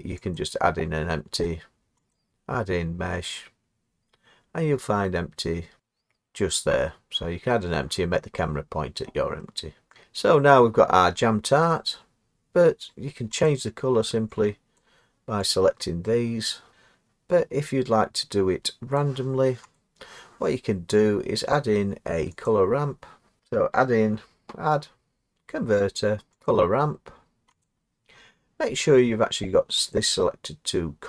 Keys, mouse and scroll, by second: 0.4 click, 2.2 click, 9.9 scroll, 9.9 click, 12.0 scroll, 12.7 scroll down 2, 13.5 click, 14.8 click, 19.0 click, 19.8 click, 22.5 click, 26.5 click, 27.6 click.